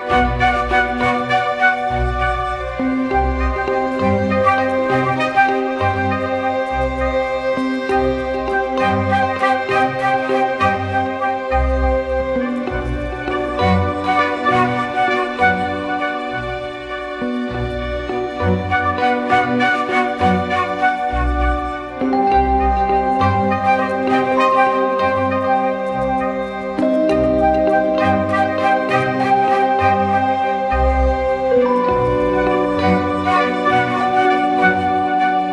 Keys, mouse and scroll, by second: 6.6 double click, 10.2 double click, 11.2-11.6 typing, 13.7 double click, 25.7 double click, 29.2 ctrl+t, 31.3 alt+shift+click.